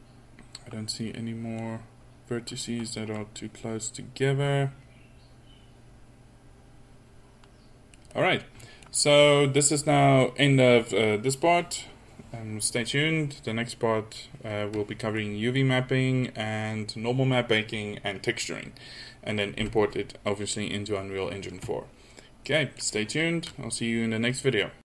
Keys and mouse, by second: 8.1-8.9 middle drag.